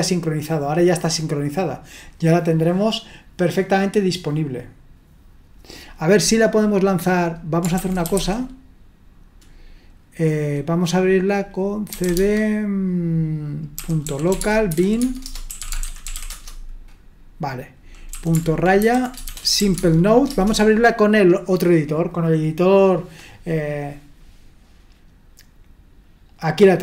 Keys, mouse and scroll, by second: 7.8-8.6 typing, 11.7-12.5 typing, 13.8-16.6 typing, 18.5-20.1 typing, 20.3 Return.